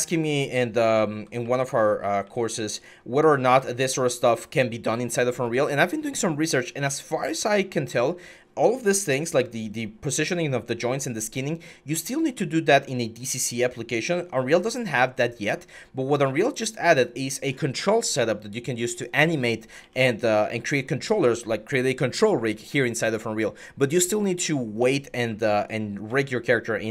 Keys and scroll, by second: 0.0-2.5 typing, 5.3 ctrl+z, 7.0-7.6 typing, 9.8 w, 14.8 ctrl+z, 17.8 s, 19.6-20.2 typing, 21.4-25.9 typing.